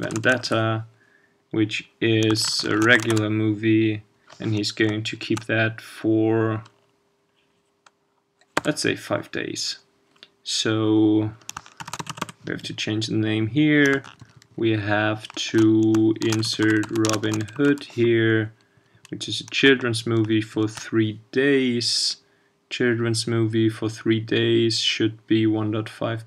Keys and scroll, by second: 3.1 ctrl+shift+space.